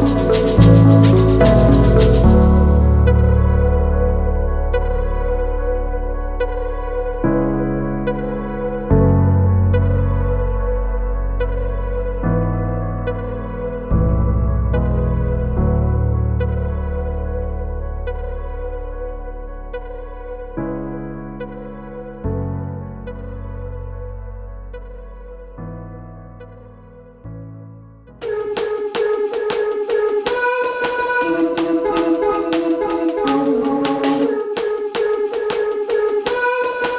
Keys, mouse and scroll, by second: 0.7 alt+middle click, 2.7 alt+click, 3.6 click, 4.4 click, 5.7 click, 6.5 click, 7.4 click, 8.4 click, 8.8 click, 9.6 click, 12.3 alt+click, 12.8 scroll up 2, 13.1 alt+click, 13.5 shift+right click, 14.5 scroll up 2, 14.8 alt+click, 15.3 alt+middle click, 15.8 scroll down 1, 16.1 alt+middle click, 16.6 scroll down 1, 17.5 scroll down 1, 17.7 alt+click, 18.0 alt+middle click, 19.6 click, 22.4 alt+click, 22.8 middle click, 22.9 alt+scroll up 1, 23.1 middle click, 23.3 alt+click, 23.8 shift+right click, 24.6 scroll up 3, 24.9 alt+click, 25.3 scroll down 2, 25.7 alt+middle click, 26.2-26.5 scroll up 3, 26.5 middle click, 30.9 click, 31.0 double click, 31.6-32.7 typing, 33.8-35.7 typing, 36.4 Return.